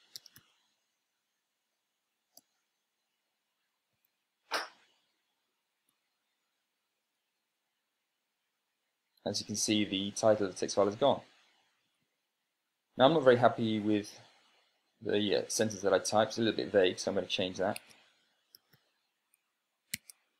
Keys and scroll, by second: 0.3 Tab, 0.7-1.0 typing, 4.6 super+space, 6.6 super+[, 7.8 Right, 13.5 Down, 18.4 Tab, 18.9-19.9 typing.